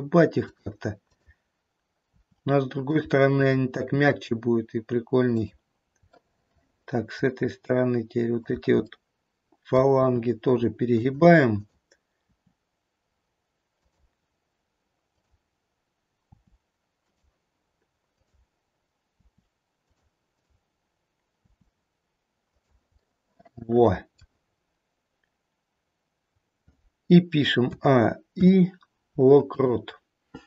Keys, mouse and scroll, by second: 1.0 click, 2.0 r, 3.3 click, 4.5 r, 6.1 middle click, 8.2 click, 9.0 middle click, 10.0 r, 11.5 click, 12.8 r, 15.1 click, 16.3 r, 18.0 click, 19.1 r, 20.2 click, 21.3 r, 23.0 middle click, 24.0 middle click, 24.3-27.0 scroll down 1, 27.0-27.5 scroll down 2, 27.7 a, 28.3 i.